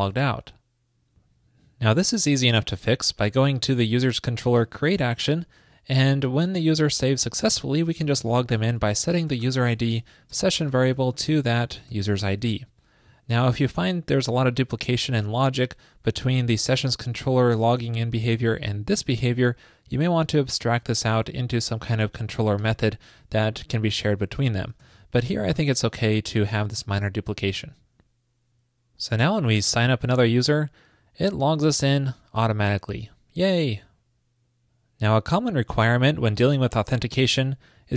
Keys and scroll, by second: 10.1 super+Right, 24.8 super+s.